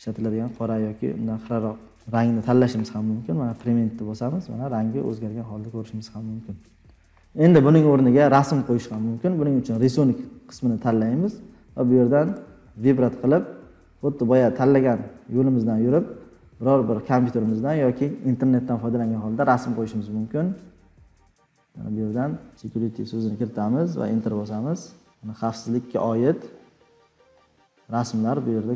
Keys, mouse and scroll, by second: 0.5 click, 3.6 click.